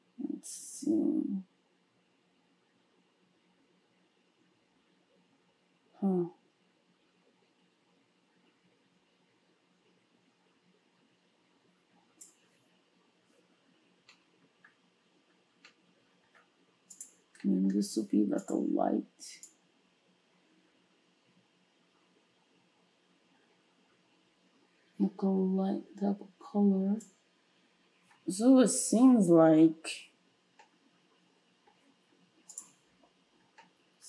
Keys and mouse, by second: 17.0-17.3 drag, 17.3-34.0 middle drag.